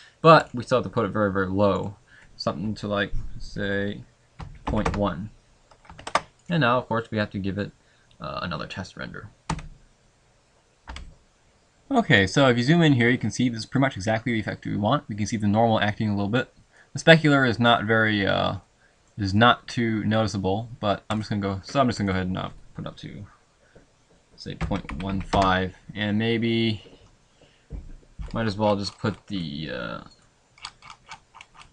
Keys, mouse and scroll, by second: 6.1 ctrl+s.